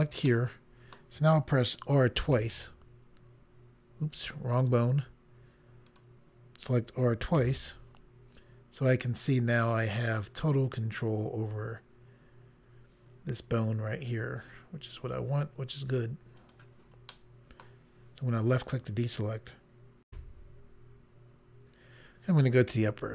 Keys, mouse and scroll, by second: 0.3 middle click, 2.1 typing, 4.5 right click, 5.8 click, 7.4 typing, 16.4 right click, 17.1 middle click, 18.4 click, 20.1 Pause.